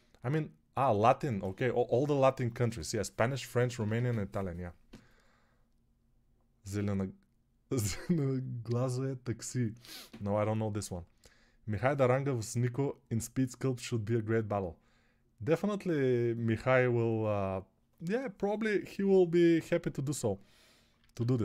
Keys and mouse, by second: 20.9 alt+q.